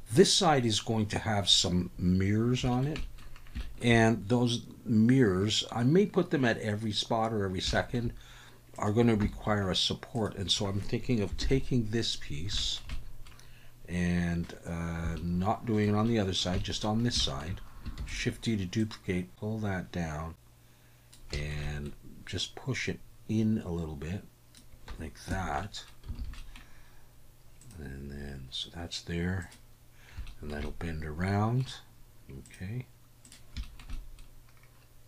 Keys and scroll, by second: 9.2 Tab, 11.4 ctrl+l, 18.0 shift+d, 25.3 Tab, 26.2 alt+a.